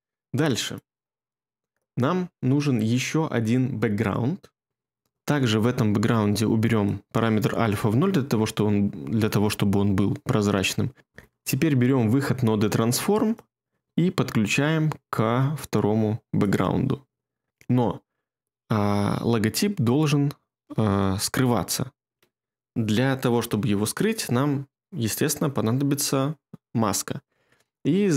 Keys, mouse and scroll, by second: 11.0 BackSpace.